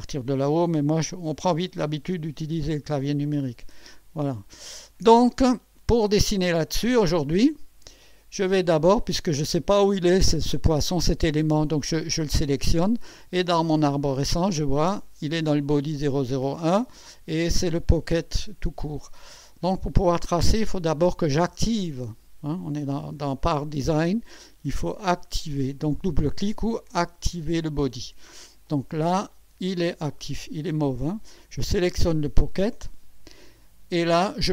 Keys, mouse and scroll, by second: 1.3 1, 2.0 2, 2.6 5, 4.0 1, 8.7 right click, 9.5 click, 12.1 click, 13.4-13.7 scroll down 1, 25.0 right click, 26.9 click, 28.7 click, 31.8 click.